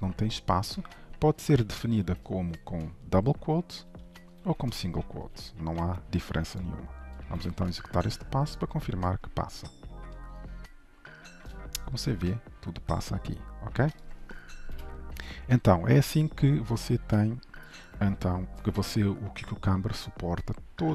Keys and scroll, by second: 10.2 shift+F10, 14.8 ctrl+shift+F12.